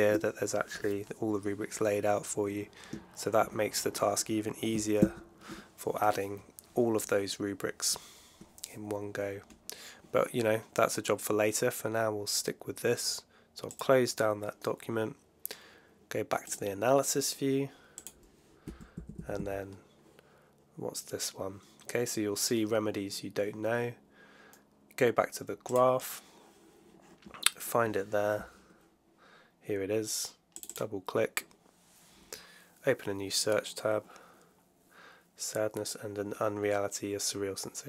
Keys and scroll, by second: 3.3 alt+1, 4.9 super+F7, 18.6 Right.